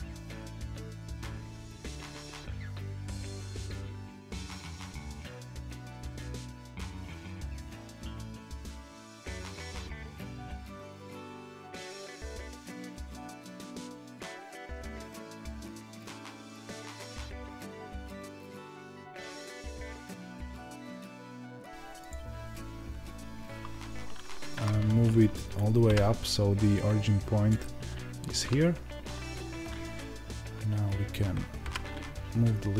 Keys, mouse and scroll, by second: 0.2-3.8 shift+middle drag, 1.0 shift+a, 1.4 Tab, 3.8 Tab, 5.4 ctrl+r, 8.3 s, 13.9 2, 14.0 click, 15.6-19.4 middle drag, 16.0 g, 17.1 Tab, 17.6 KP_1, 18.6 Tab, 19.4 click, 20.2 alt+m, 20.7 shift+middle click, 21.1 Tab, 21.3 click, 23.6 Tab.